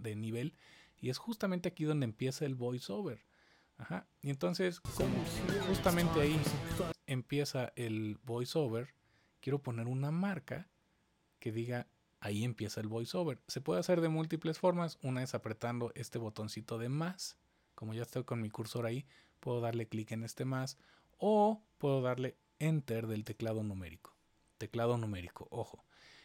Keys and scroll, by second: 4.7 space, 6.7 space, 23.2 Return.